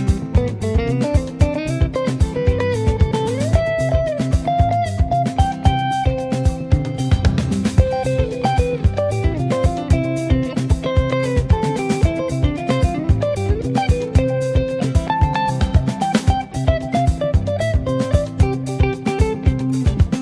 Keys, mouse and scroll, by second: 0.1 middle click, 0.7 ctrl+alt+KP_0, 1.2 KP_Enter, 1.9 click, 2.2 KP_0, 2.7-3.2 scroll down 1, 3.2 alt+middle click, 3.5 click, 3.8 shift+middle click, 3.9 shift+scroll up 2, 4.4 click, 4.8 s, 6.4 scroll up 2, 6.7-7.9 shift+middle drag, 7.9 click, 8.6 click, 9.4-11.8 drag, 11.9 click, 12.4 click, 12.7 scroll down 2, 13.2 click, 13.6 middle click, 14.1 click, 14.5 shift+middle click, 15.3 click, 16.6 g, 19.5-20.2 drag.